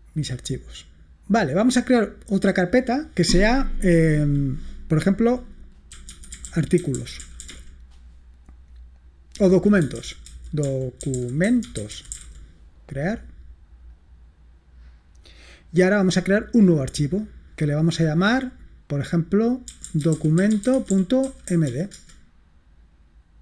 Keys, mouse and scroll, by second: 2.7 click, 5.8-8.3 typing, 10.1-12.8 typing, 16.6 click, 19.5-22.2 typing.